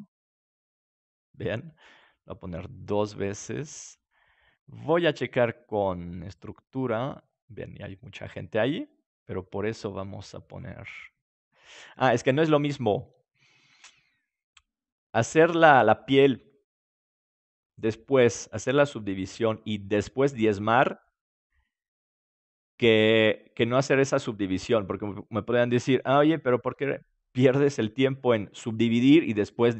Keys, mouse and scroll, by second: 2.8-6.3 drag, 10.4-16.4 drag.